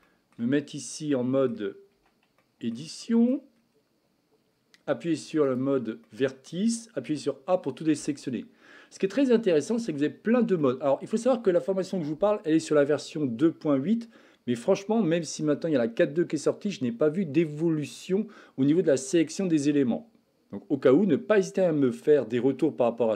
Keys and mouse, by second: 0.1 shift+middle drag, 1.2-1.5 middle drag, 2.0 Tab, 2.4 shift+middle click, 3.0 middle click, 5.5 click, 6.0 middle click, 7.0 a, 10.5 middle click.